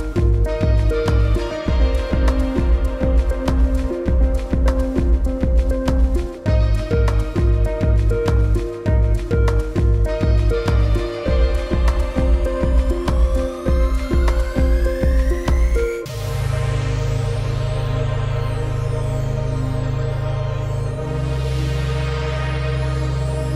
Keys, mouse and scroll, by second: 1.3 click, 1.8 space, 1.9 click, 2.1 space, 2.5-3.7 alt+scroll up 4, 2.8 click, 3.7 super+s, 6.4 alt+scroll down 1, 6.6 click, 7.0 space, 7.2 alt+scroll down 2, 7.4 click, 7.6 space, 8.2 ctrl+v, 8.5 click, 9.6 shift+click, 10.2 space, 10.4 click, 10.6 scroll down 1, 10.9 click, 11.1-11.9 alt+scroll up 3, 11.9 super+s, 14.2 Tab, 14.4-15.0 alt+scroll down 2, 14.6 click, 15.0 space, 15.1 click, 15.3 space, 15.6 alt+scroll up 2, 15.8 click, 16.3 v, 16.7 click, 17.8 shift+click, 19.1 scroll down 1, 19.2 space, 19.3 click, 19.6 space, 19.8 alt+scroll up 1, 20.3 space, 21.2 alt+scroll up 2, 21.4 click, 21.7 space, 21.9 click, 22.2 space, 23.2 scroll down 1, 23.4 click.